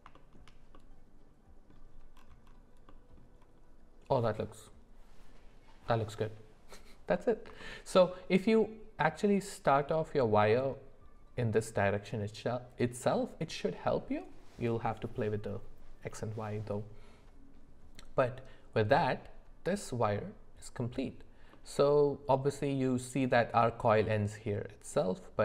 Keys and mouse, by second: 0.1 shift+middle click, 0.7 middle click, 7.6 shift+middle click, 21.5 middle click.